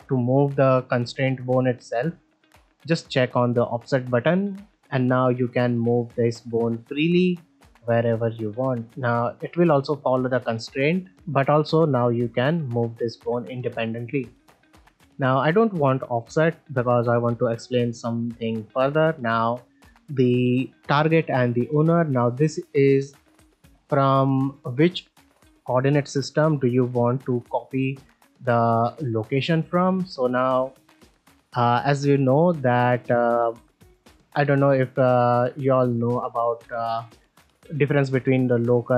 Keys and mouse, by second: 2.8 click, 3.9 middle drag, 4.3 shift+middle click, 4.6 ctrl+middle click, 4.9 middle click, 7.2 middle drag, 8.3 middle drag, 10.7 middle drag, 13.9 middle drag, 15.7 click, 16.3 middle drag, 16.7 ctrl+middle drag, 34.2 middle drag, 34.8 ctrl+middle drag, 35.4 ctrl+Tab, 36.4 click, 36.9 alt+z, 38.2-38.9 drag.